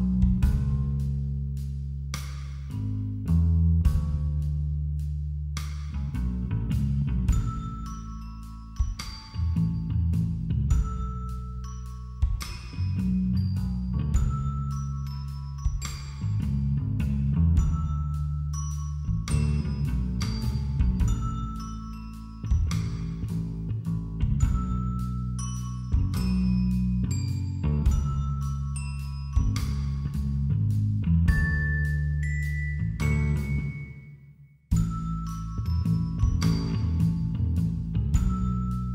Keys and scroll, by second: 0.4 ], 2.0 [, 29.0 ].